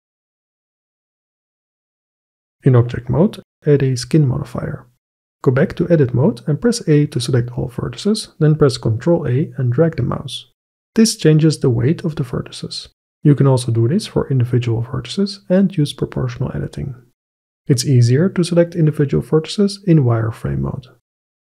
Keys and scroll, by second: 0.3 ctrl+r, 0.5-2.0 typing, 0.9 Delete, 2.1 Delete, 2.7 Tab, 5.7 Tab, 6.8 a, 9.2 ctrl+a, 14.0 ctrl+a, 16.3 ctrl+a.